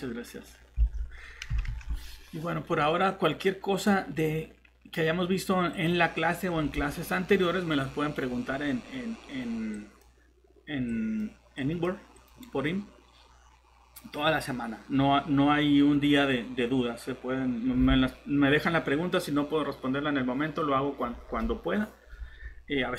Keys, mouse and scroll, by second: 0.8 alt+Tab, 1.6 Tab, 12.8 scroll down 1, 13.4 scroll up 1.